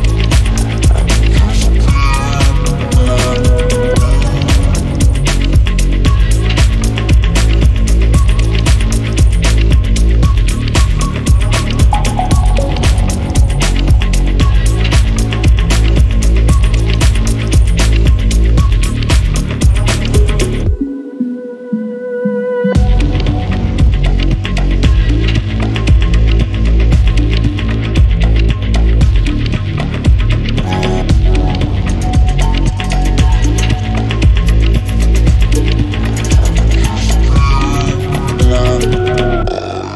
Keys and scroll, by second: 2.5 Escape, 3.8 1, 4.6 Return, 8.0 q, 11.6 Escape, 17.9 3, 17.9 Return, 18.1 3, 18.2 Return, 20.5-21.0 typing, 29.4 Escape, 38.6 1, 39.3 Return.